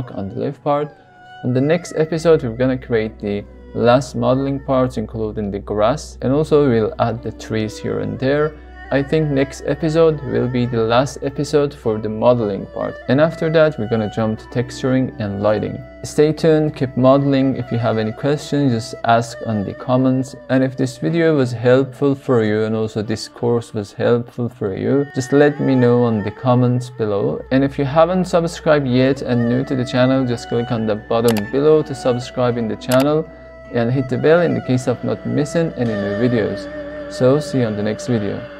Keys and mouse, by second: 2.7 Tab, 3.5 click, 4.2-5.2 middle drag, 5.4 shift+middle click, 11.7-12.2 shift+middle drag.